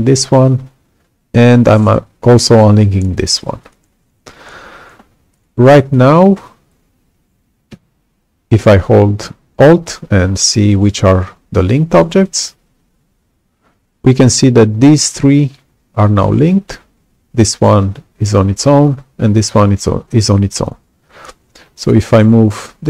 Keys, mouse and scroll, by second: 3.6 ctrl+click, 5.9 click, 21.7 click.